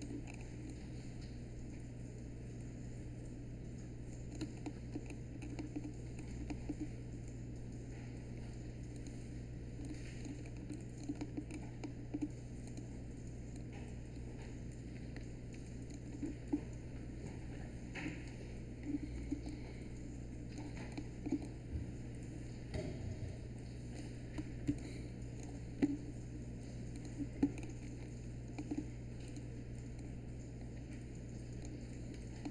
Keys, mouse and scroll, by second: 24.6 space.